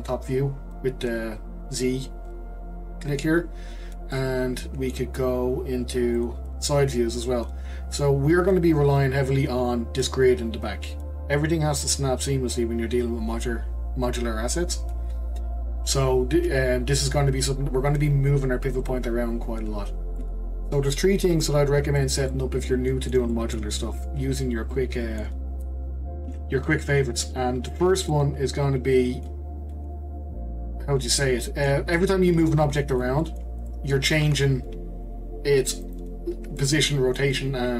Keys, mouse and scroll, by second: 3.4-4.1 scroll up 1, 4.1-6.2 middle drag, 6.2 click, 6.8 scroll down 2, 7.1-10.3 scroll up 3, 17.4-18.2 scroll down 1, 20.2-23.9 middle drag, 23.9-24.7 scroll down 2, 24.7-26.2 middle drag, 26.2 q, 28.1-29.6 middle drag, 29.6 scroll up 1, 29.7-32.6 middle drag, 32.6 click, 33.2-33.6 middle drag, 33.6-34.2 scroll down 1, 34.2 g, 36.3-36.6 scroll down 2, 36.6-37.5 shift+middle drag, 37.5-37.7 scroll up 1.